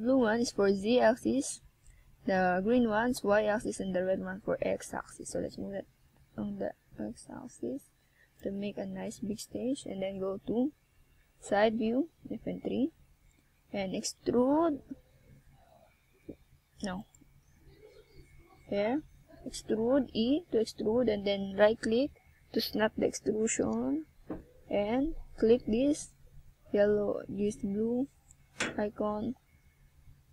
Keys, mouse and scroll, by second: 0.7 Tab, 2.1 click, 7.1 click, 9.0 click, 9.3 click, 13.0 click, 14.3 Tab, 14.9 scroll down 1, 15.2 Tab, 15.6 middle click, 19.4 click, 20.2 click, 21.8 middle click, 24.5 middle click, 27.8 Tab, 28.9 shift+scroll up 1.